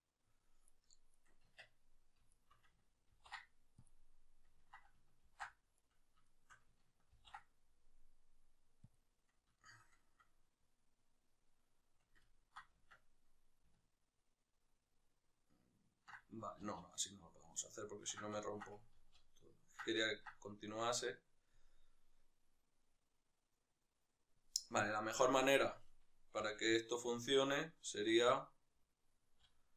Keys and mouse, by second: 0.8 right click, 1.4 Tab, 2.0 shift+right click, 3.6 ctrl+p, 5.1 ctrl+z, 5.5-6.1 right drag, 8.7 ctrl+p, 9.3-24.5 shift+middle drag, 12.7 Tab, 16.5 ctrl+z, 18.8 ctrl+z, 24.5 right click, 25.3-26.1 right drag, 26.1 g, 27.1-29.1 right drag, 29.1 z.